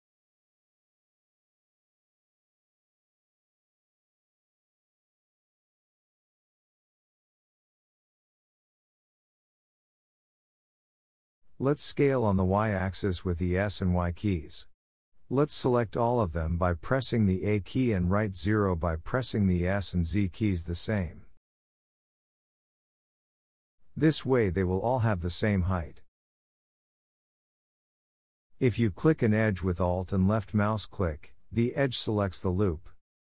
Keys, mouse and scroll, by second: 0.1-0.5 scroll down 1, 0.5 Tab, 0.7-1.7 middle drag, 1.7 Tab, 2.2 ctrl+r, 3.8-4.4 shift+scroll up 5, 3.8 shift+middle click, 4.4 g, 6.7-8.6 middle drag, 8.6 g, 11.0 middle click, 11.9 ctrl+z, 12.4 ctrl+r, 15.2 ctrl+r, 16.4 shift+middle click, 16.6-17.0 scroll up 4, 17.0-17.3 scroll down 3, 17.3 shift+middle click, 17.8 2, 18.2 alt+shift+click, 18.6 middle click, 19.0 g, 22.3-23.7 middle drag, 23.7 a, 24.2 s, 26.5 2, 26.7 alt+click, 27.4 g, 28.8 alt+click, 29.6 alt+shift+click, 30.0 g, 31.8 Tab, 32.1-33.2 middle drag.